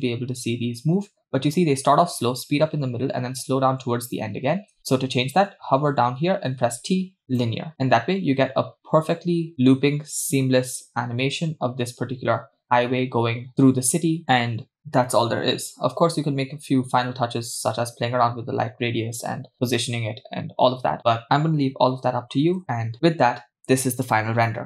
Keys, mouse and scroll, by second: 4.8 space, 6.5 t, 7.8 space, 12.2 space, 17.5 click.